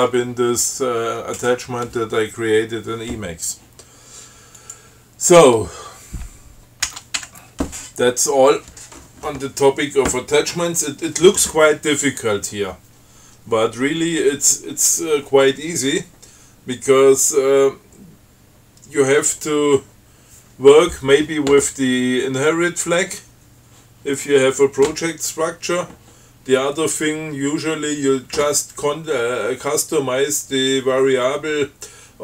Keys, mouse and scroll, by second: 4.9 click, 7.1 ctrl+x, 7.4 ctrl+1, 8.0 ctrl+scroll up 3, 8.5 scroll down 2, 8.8 scroll up 2.